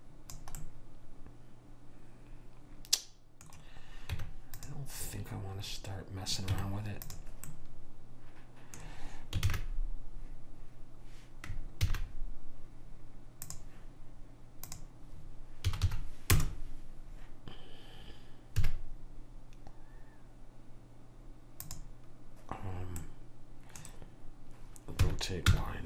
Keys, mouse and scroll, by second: 0.7-2.4 middle drag, 4.2 Tab, 6.6 Tab, 9.6 shift+a, 12.0 shift+a, 14.8 click, 18.7 s, 23.1-25.1 middle drag, 25.1 r.